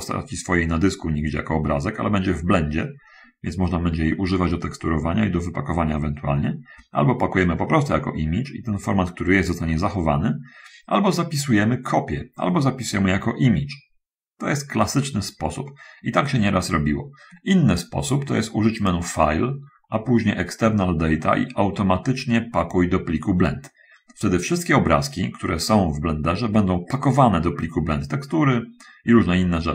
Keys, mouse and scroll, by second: 18.9 click.